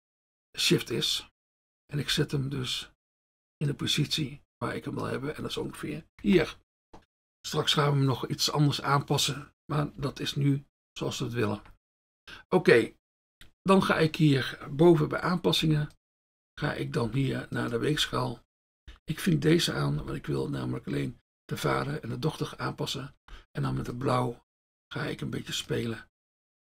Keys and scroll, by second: 17.1 F1, 18.0 F1, 20.0 F1, 23.7 F1.